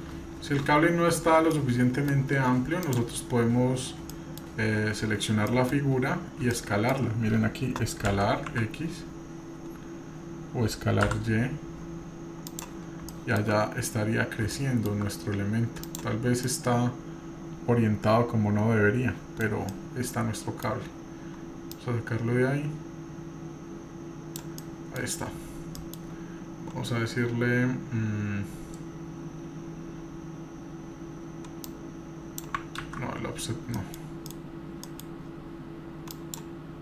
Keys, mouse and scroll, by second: 0.1-0.7 scroll down 3, 1.3 scroll down 4, 1.5-2.3 middle drag, 2.8 click, 3.5-4.1 scroll up 1, 4.1 middle click, 4.1 scroll up 1, 5.5 middle click, 5.9 scroll up 1, 6.5-6.9 shift+middle drag, 8.1 s, 13.1-13.4 shift+middle drag, 13.6-14.5 scroll up 3, 14.5-15.0 shift+middle drag, 15.1-15.9 scroll up 1, 15.9 click, 16.5-19.4 middle drag, 19.4 scroll down 1, 19.7-20.7 middle drag, 21.7 click, 24.6-25.0 middle drag, 25.0-25.8 scroll down 3, 25.8-26.2 middle drag, 26.9 scroll down 1, 27.9-29.7 scroll up 3, 29.7-30.1 scroll up 1, 31.7 click, 32.8 ctrl+z, 33.2-34.4 scroll down 6, 33.8 middle click, 34.3 middle click, 34.5-35.0 middle drag, 35.2 scroll down 2, 36.1 drag.